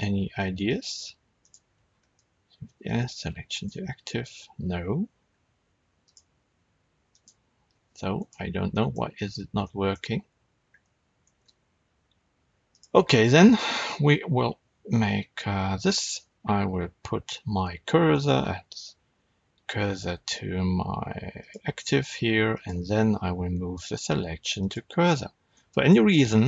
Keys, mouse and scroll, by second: 0.6 click, 1.3 shift+click, 2.2 shift+s, 5.1 ctrl+z, 6.0 click, 7.0 shift+click, 8.1 click, 8.6-15.9 middle drag, 11.2 shift+s, 14.2 ctrl+z, 15.9 click, 17.4 shift+s, 22.4 click, 23.2 shift+s, 25.5-26.4 middle drag.